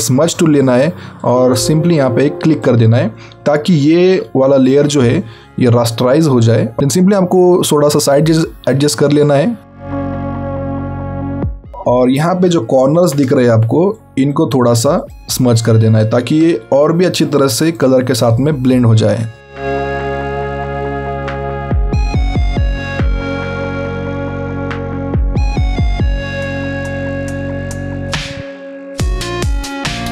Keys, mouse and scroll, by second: 3.9 alt+scroll up 1, 4.7-6.7 scroll up 3, 6.8 alt+right click, 10.7 scroll down 1, 11.5-12.5 alt+scroll up 2, 12.6 ctrl+scroll up 1, 13.1-13.9 scroll up 3, 13.9 click, 16.5-17.1 alt+scroll down 2, 17.1 click, 21.2 alt+scroll down 1, 21.3 alt+scroll up 2, 21.7 alt+right click, 22.1 click, 24.9 click, 26.1 alt+scroll down 1, 26.3-26.6 alt+scroll up 2, 26.7 click, 27.6 click, 28.2 click.